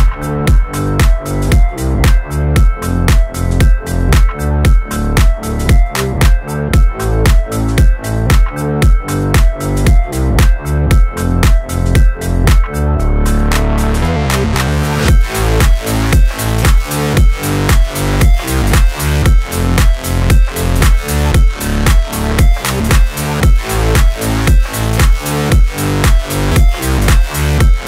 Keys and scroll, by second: 2.7 ctrl+z, 17.5 Return, 23.7 Delete, 25.3 BackSpace.